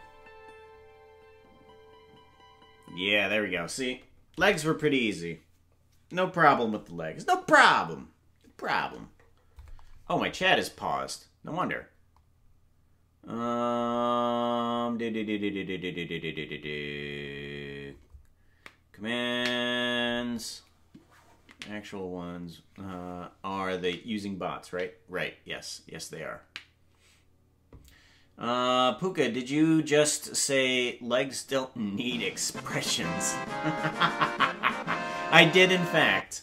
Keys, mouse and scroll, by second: 6.2 ctrl+s, 6.2 space.